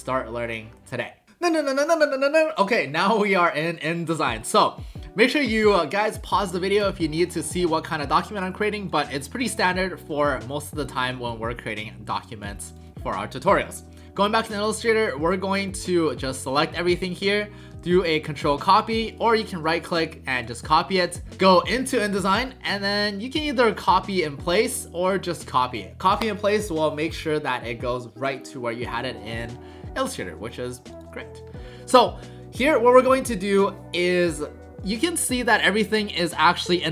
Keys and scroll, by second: 17.9 ctrl+c.